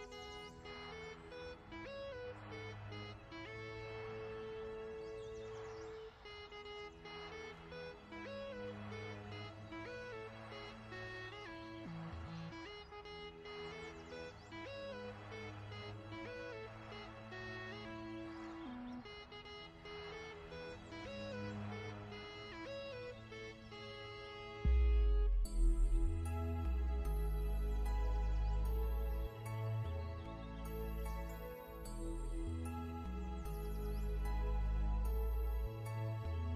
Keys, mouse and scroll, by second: 0.0 click, 1.0 click, 1.8 click, 2.2 scroll down 1, 2.5 click, 3.6 i, 3.8 click, 4.3 v, 4.5 click, 4.8-5.3 scroll up 1, 5.3 click, 7.8 alt+shift+scroll down 2, 8.1 scroll up 1, 8.3-9.0 ctrl+scroll down 2, 9.0 click, 12.9 scroll up 1, 13.4 ctrl+scroll up 1, 14.8 click, 15.9 click, 19.2 shift+click, 19.8 ctrl+z, 20.2 click, 20.4 v, 20.5 click, 21.8-22.8 alt+shift+scroll down 2, 22.8 click, 23.5 ctrl+scroll down 2, 27.4 click, 28.3 shift+click, 29.0 shift+click, 30.4 click, 30.7 v, 30.9 click, 34.0 BackSpace, 34.8 ctrl+z, 35.1 click, 36.1 BackSpace, 36.4 click.